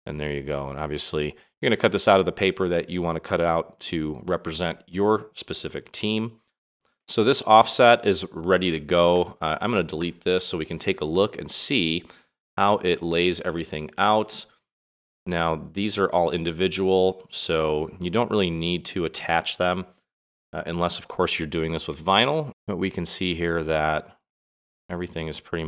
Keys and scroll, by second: 9.9 Delete.